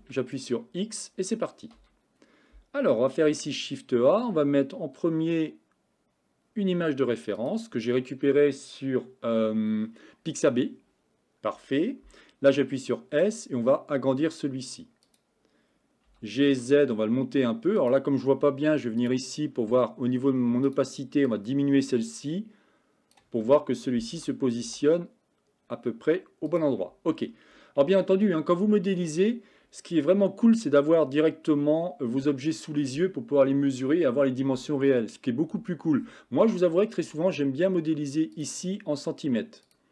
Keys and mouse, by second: 0.0 x, 1.8 KP_1, 3.3 shift+a, 12.5 s, 16.1 g, 20.7 click, 21.3-23.3 drag, 24.2 g, 28.1-29.1 shift+middle drag, 38.4 click, 39.8 click.